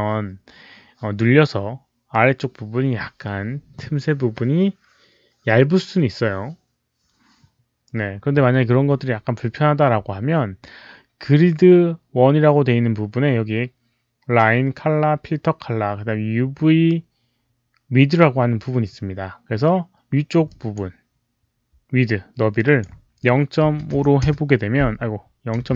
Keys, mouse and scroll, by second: 20.4 click, 22.5 click, 23.6 KP_Decimal, 23.9 KP_5, 25.5 Return, 25.5 click, 25.5 typing.